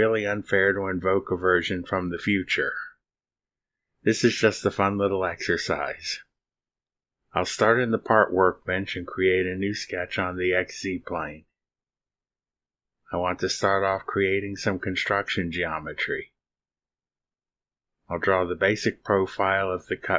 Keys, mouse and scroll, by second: 7.7 click, 10.1 click, 11.2 click, 12.4 middle click, 13.4-14.6 middle drag, 14.6-15.8 scroll up 1, 15.8 click, 17.2 click, 18.5 click, 20.0 click.